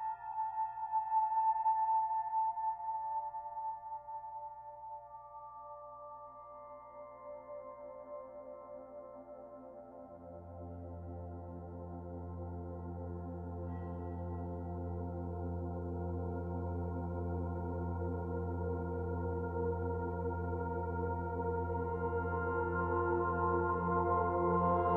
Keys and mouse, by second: 0.8 click, 1.6-2.8 alt+shift+drag, 2.0-2.9 typing, 2.9 click, 3.7-5.4 ctrl+alt+drag, 5.5 alt+shift+click, 6.0 ctrl+alt+click, 6.8-12.1 drag, 6.8-7.7 typing, 12.6-17.3 drag, 16.7 typing, 20.3-22.3 drag, 22.3 ctrl+s.